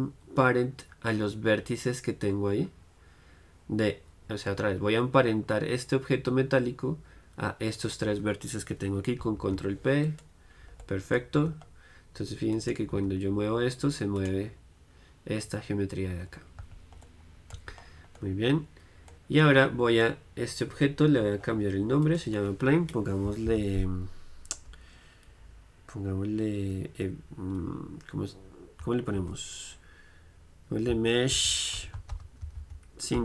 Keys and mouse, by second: 10.9-12.6 drag, 11.5 Tab, 12.6-16.4 right drag, 13.0 g, 16.4-22.1 middle drag, 16.7 z, 17.6 z, 22.1-24.0 drag.